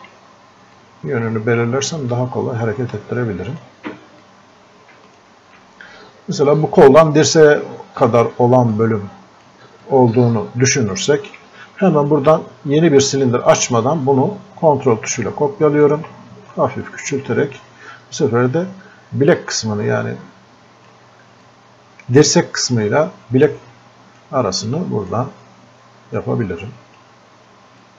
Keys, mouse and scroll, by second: 8.7-13.2 drag, 13.2-27.9 ctrl+drag.